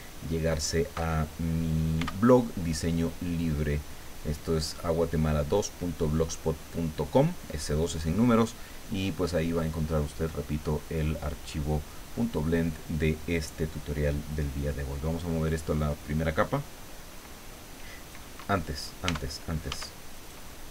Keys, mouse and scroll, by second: 2.0 b, 3.1-6.5 drag, 19.1 Tab, 20.1 Tab, 20.1 right click.